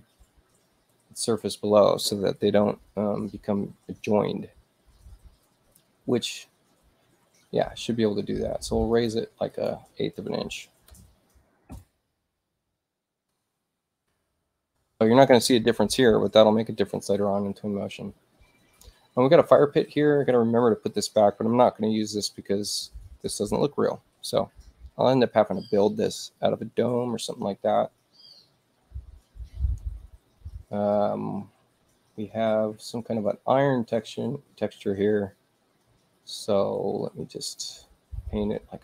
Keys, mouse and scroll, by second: 1.4 click, 8.9 click, 9.5 click, 11.0 /, 11.3 8, 11.7 Return, 20.8 click, 37.4 click.